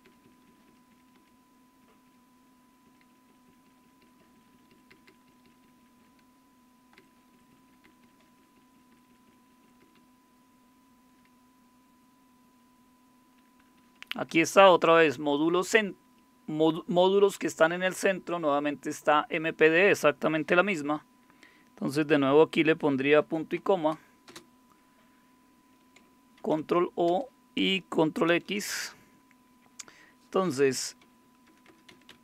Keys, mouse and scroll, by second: 0.0 Down, 0.2 Down, 0.6 Down, 1.1 Down, 1.1 Down, 1.8 Down, 2.9 Down, 3.3 Down, 3.5 Down, 3.8 Down, 4.0 Down, 4.2 Down, 4.6 Down, 5.1 Down, 5.6 Down, 5.8 Down, 6.0 Down, 7.0 Down, 7.1 Down, 7.3 Down, 7.7 Down, 7.8 Down, 8.2 Down, 8.4 Down, 8.5 Down, 8.9 Down, 9.1 Down, 9.5 Down, 9.6 Down, 10.0-11.1 Down, 13.4-14.8 typing, 24.3 typing, 26.4 ctrl+o, 27.1 Return, 28.3 ctrl+x, 30.7-32.2 typing.